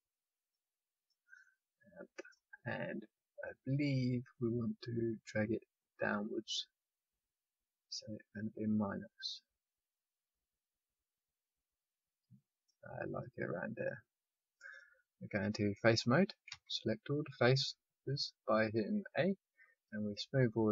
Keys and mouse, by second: 0.5-2.1 middle drag, 4.3-8.2 drag, 15.8-18.2 drag, 16.4 a, 19.8-20.7 drag, 20.4-20.7 middle drag, 20.4-20.7 right drag.